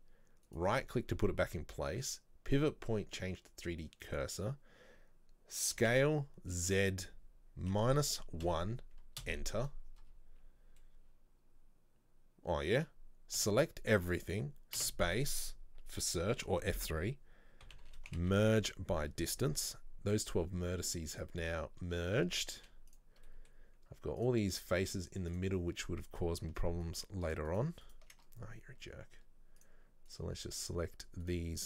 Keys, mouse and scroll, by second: 4.2-5.9 drag, 5.9 s, 10.1-10.6 scroll down 1, 10.8 scroll down 5, 10.9-13.5 middle drag, 13.5 a, 19.7-20.2 scroll up 1, 21.2 click, 21.6 z, 23.3 middle click, 24.3 click, 25.4 click, 26.2-27.7 alt+right drag, 27.9 alt+shift+right click, 28.5-29.7 scroll up 2, 29.7 click, 30.2 right click, 30.6 shift+right click, 31.3 shift+right click.